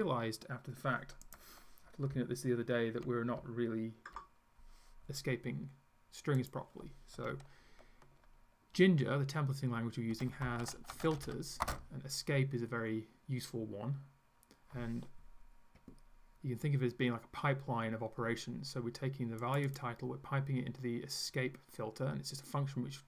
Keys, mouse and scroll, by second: 6.5 click, 10.1-11.8 typing, 19.4 click.